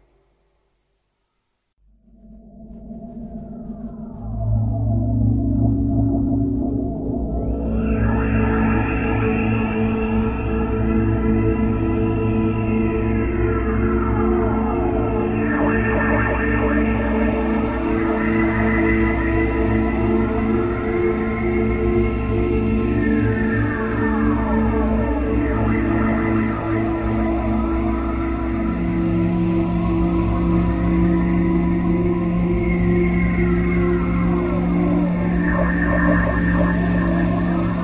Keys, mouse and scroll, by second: 0.3 KP_1, 1.8 scroll down 1, 4.4 click, 5.9 click, 8.5 click, 11.7 KP_7, 12.6-13.1 scroll down 4, 15.3 click, 20.0 s, 22.0 click, 23.3 KP_1, 25.1 click, 28.6 middle click, 32.0-32.8 scroll up 3, 32.8 middle click, 33.5-33.9 scroll down 1, 33.9 KP_5, 35.3 middle click.